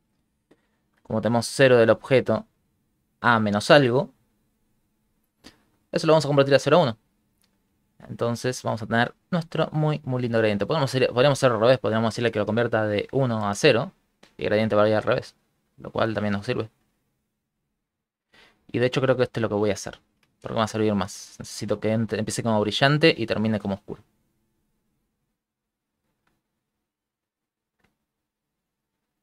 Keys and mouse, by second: 0.5 ctrl+middle click, 0.5 shift+middle click, 1.1 ctrl+click, 2.1 click, 3.1 click, 3.3 ctrl+click, 3.9 click, 4.0 ctrl+click, 4.4 click, 4.5 ctrl+click, 4.6 click, 6.9 ctrl+middle click, 7.4 ctrl+middle click, 7.7 shift+middle click, 7.8 shift+middle click, 10.9 click, 12.7 click, 15.2 click, 27.5 shift+click.